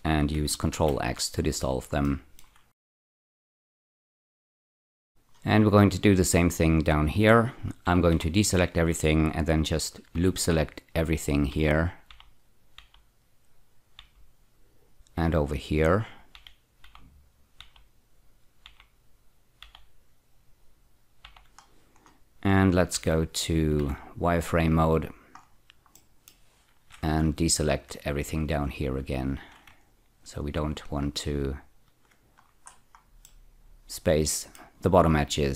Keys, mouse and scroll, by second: 0.7 ctrl+x, 1.4 scroll down 5, 2.1 shift+middle click, 2.6 scroll up 2, 3.1-4.9 typing, 3.8 shift+middle click, 4.3 click, 4.4 click, 4.9 scroll down 3, 5.1 middle click, 5.1 scroll up 2, 8.0 typing, 10.2 ä, 11.5 ä, 12.8 typing, 14.0 ä, 16.4-16.8 typing, 18.7-19.7 typing, 21.0-21.8 typing, 21.7 scroll down 2, 22.9 scroll down 1, 22.9 z, 23.8 z, 24.6 click, 25.4-26.0 scroll down 1, 26.0 middle click, 27.8 ctrl+click, 29.2 shift+click, 30.9 ctrl+click, 32.4-33.3 scroll up 3, 33.3-34.8 middle drag.